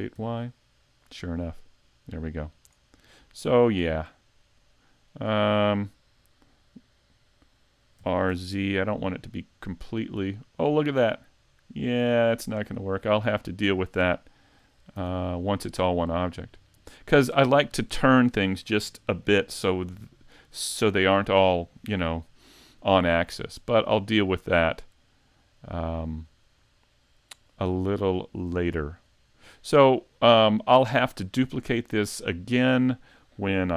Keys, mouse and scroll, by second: 2.6 click, 3.0 middle click, 4.6 click, 8.0 r, 12.7 right click, 13.2 middle click, 15.0 a, 15.3-15.7 scroll down 1, 15.7 middle click, 22.9 middle click, 28.2 shift+middle click, 29.1-31.3 scroll down 1.